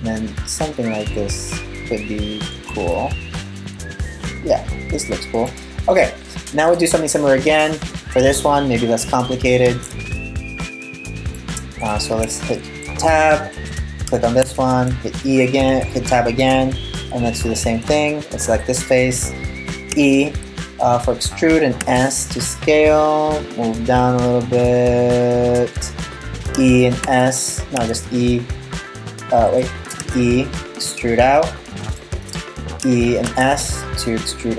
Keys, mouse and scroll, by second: 2.5 middle click, 5.3-5.6 scroll up 3, 5.6-6.7 scroll down 5, 6.3 right click, 6.7 middle click, 11.4 right click, 11.7 Tab, 13.1 right click, 14.1 Tab, 15.5 shift+middle click, 16.1 scroll down 2, 16.5-18.1 scroll up 4, 18.1 right click, 19.5 e, 26.2 e, 29.6 e, 32.4 e.